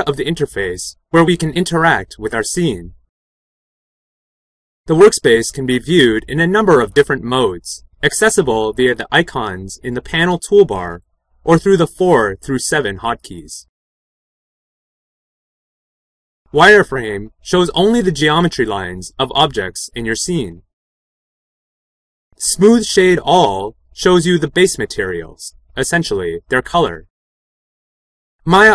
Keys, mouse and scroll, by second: 16.4 4, 21.9 5.